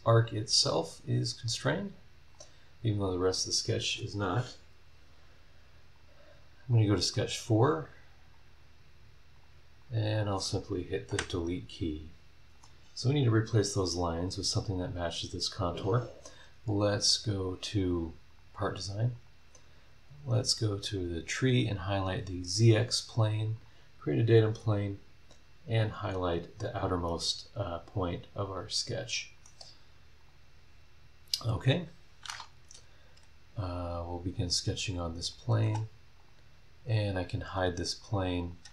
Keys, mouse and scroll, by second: 0.9 click, 2.3 click, 5.9 click, 7.1 right click, 8.3 click, 9.3 click, 9.8 click, 10.1 click, 11.1 Delete, 12.5 click, 13.7 scroll down 1, 15.4 scroll down 2, 15.7 scroll up 2, 17.0 click, 18.3 click, 19.1 click, 20.3 click, 21.9 click, 23.5 click, 26.0 click, 27.0 middle click, 27.4 click, 27.6-29.6 right drag, 30.2 click, 30.7 scroll down 1, 31.5 click, 34.1 click, 35.2 click, 35.6 space, 36.2 click, 37.0 click, 38.0 click, 38.4 click, 38.6 space.